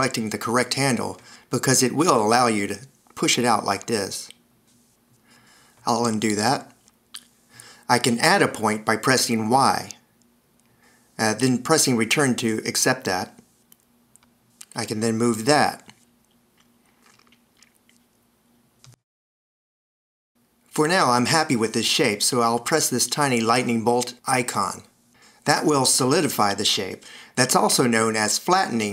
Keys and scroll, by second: 6.8 super+z, 11.0 y, 13.6 Return, 15.0 a, 20.3 Escape.